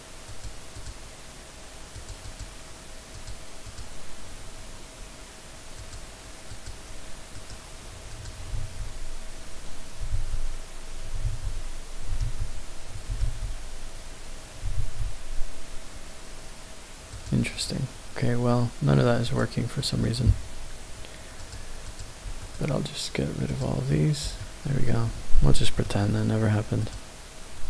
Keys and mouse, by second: 0.7 click, 1.9 click, 2.2-3.2 drag, 3.7 click, 5.7 shift+click, 6.5 shift+click, 8.1 click, 9.3 ctrl+z, 10.9 ctrl+z, 12.0 ctrl+z, 12.9 ctrl+z, 14.2 ctrl+z, 15.5 ctrl+z, 17.1 click, 17.6 click, 21.3 shift+click, 21.8 shift+click, 24.4-24.8 middle drag, 25.6 shift+middle drag.